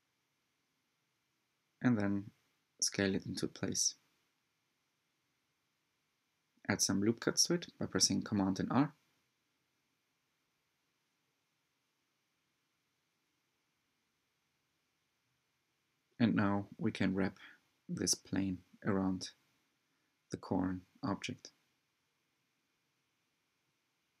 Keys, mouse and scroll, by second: 2.2 s, 3.7-4.5 drag, 4.5 s, 7.1-7.4 scroll up 2, 7.4 middle click, 8.3 Tab, 9.1 r, 11.0-14.6 middle drag, 15.8 click, 17.3 shift+click, 17.9 shift+click, 18.9 click, 20.1 g, 22.1 scroll up 2, 22.3-24.2 shift+middle drag.